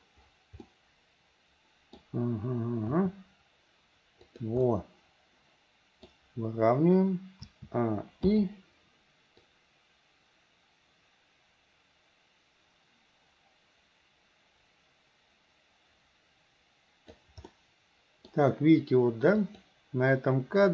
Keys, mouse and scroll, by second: 0.7-2.0 middle drag, 2.9 r, 4.7-6.1 middle drag, 7.5 a, 8.3 i, 9.5-17.3 drag, 17.5-18.4 middle drag, 19.5 click.